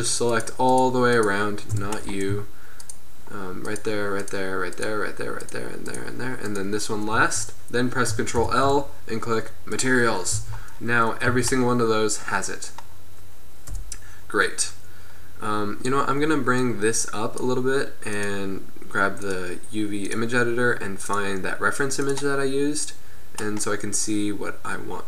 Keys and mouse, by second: 1.9 b, 8.5 ctrl+l, 10.4 z, 11.5 a, 13.7 KP_1, 16.7-17.2 drag, 22.9-25.0 middle drag.